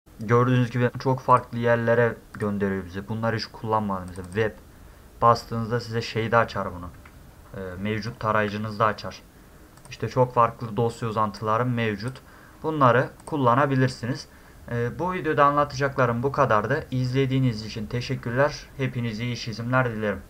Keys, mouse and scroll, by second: 1.3 click, 2.4 click, 4.1 click, 4.3 click, 6.0-7.1 middle drag, 7.3 ctrl+middle click, 7.7 ctrl+middle click, 7.9 ctrl+middle click, 8.1 ctrl+middle click, 9.8 click, 11.4-12.1 drag, 13.2 click.